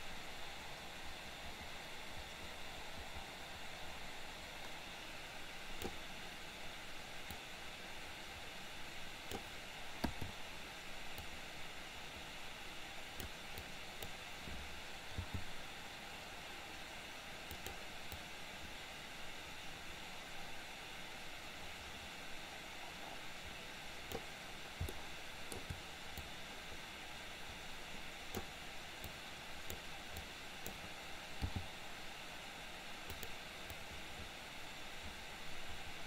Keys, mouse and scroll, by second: 7.3 click, 7.7-9.5 drag, 11.2-13.3 drag, 13.7 click, 15.2 g, 18.3-24.3 drag, 25.0 shift+middle click, 26.3-28.5 drag, 29.0-29.8 drag, 30.2-30.7 drag, 31.6 g, 33.8-36.0 drag.